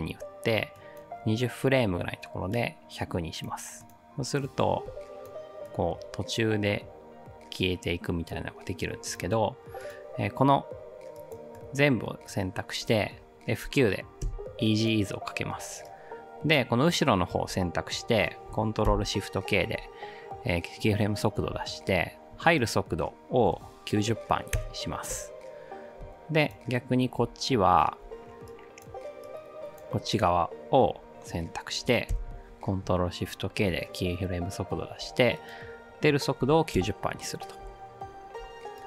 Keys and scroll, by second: 14.2 F9, 14.2 F8, 18.9 ctrl+shift+k, 25.6-26.3 typing, 32.1 ctrl+shift+k, 38.0-38.7 typing.